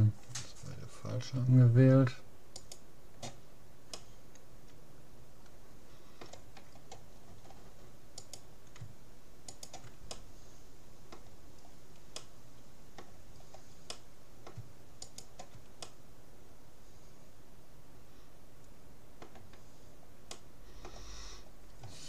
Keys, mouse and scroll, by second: 2.6-4.0 right drag, 4.0-5.6 middle drag, 6.8-8.2 scroll up 1, 8.2-11.2 right drag, 10.2-12.0 middle drag, 12.0 scroll down 1, 12.2-14.2 middle drag, 15.0 middle click, 15.0-16.6 right drag, 15.8-16.8 middle drag, 17.4 middle click, 19.8 middle click, 19.8-20.4 scroll up 1.